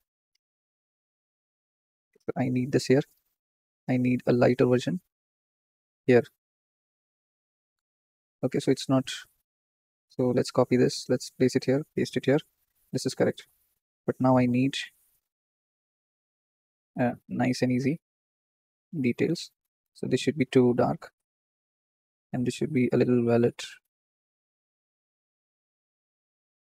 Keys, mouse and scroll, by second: 0.9-1.2 drag, 3.0 click, 9.1-11.1 drag, 11.9 ctrl+v, 14.5-16.4 drag, 17.8-20.6 drag, 23.0 click.